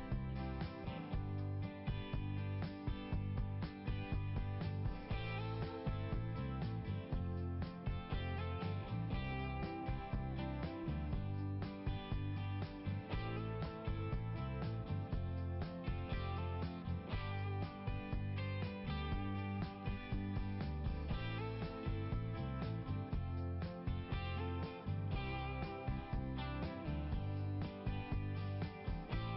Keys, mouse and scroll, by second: 2.9 scroll down 1, 3.7 scroll down 1, 5.3 scroll down 1, 6.0 scroll down 1, 10.3 click, 13.9 scroll up 1, 14.6-15.1 scroll up 2, 22.0 click.